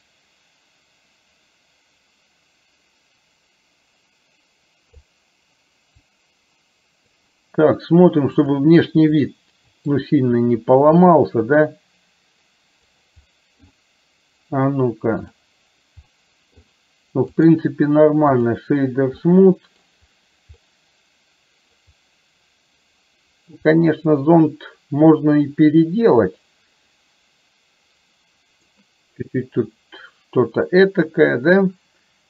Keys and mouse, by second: 6.1-7.2 drag, 9.2-10.0 middle drag, 11.5-13.0 drag, 13.5 middle click, 15.2 click, 16.2-16.6 middle drag, 17.4 right click, 20.7-21.9 middle drag, 23.7-28.7 middle drag.